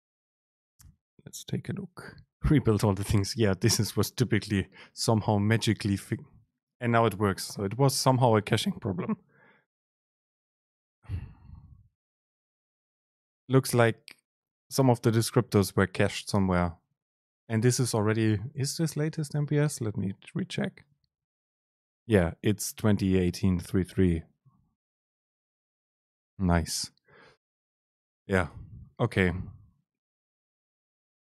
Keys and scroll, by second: 5.7 super+space.